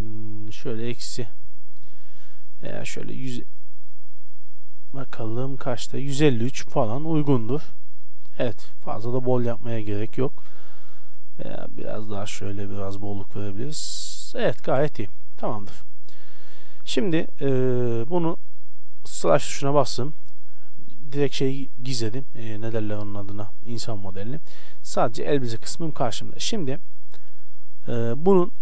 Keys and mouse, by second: 0.1-2.1 drag, 3.0-4.8 drag, 6.5 middle click, 6.9 middle click, 7.3-9.9 middle drag, 11.8-13.5 drag, 14.6 a, 14.9-17.1 middle drag, 15.3 Tab, 19.0 KP_Divide, 25.9-27.7 middle drag, 27.7-28.6 drag.